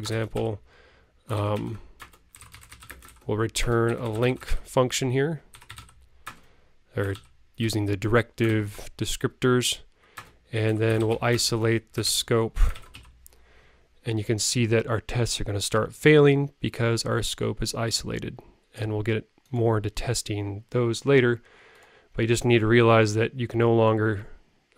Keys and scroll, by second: 1.5 super+Right, 12.7 super+Right.